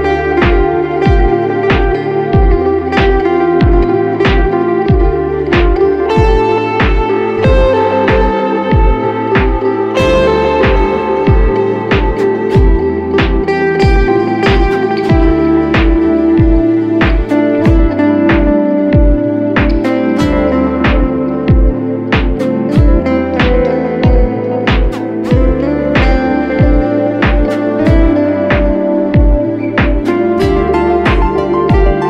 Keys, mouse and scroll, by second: 9.2-11.3 scroll down 1, 18.8-19.3 typing, 22.8 typing, 25.4 typing, 31.1 typing.